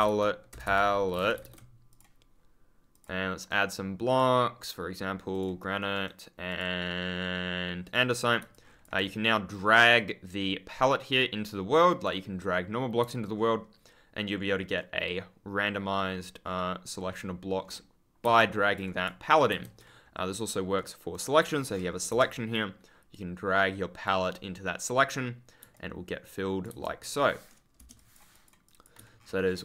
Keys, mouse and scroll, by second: 0.0-1.8 typing, 1.8 click, 2.8 click, 3.3 right click, 4.0 click, 5.2 click, 5.8 right click, 6.4 click, 7.7 click, 8.4 ctrl+click, 8.5 scroll up 1, 9.9 click, 13.1 ctrl+click, 13.3-14.3 ctrl+scroll up 1, 14.3-14.8 ctrl+scroll down 1, 15.4 ctrl+click, 15.9-16.3 ctrl+scroll up 1, 16.3 ctrl+scroll down 1, 16.8 ctrl+scroll up 1, 17.5-17.8 ctrl+scroll down 1, 18.1 ctrl+z, 19.4 ctrl+z, 20.7 right click, 21.3 scroll down 1, 22.0 Return, 23.0 click, 25.7 ctrl+click, 26.6 ctrl+z, 27.7 Return, 27.9 click, 29.1 ctrl+scroll up 1.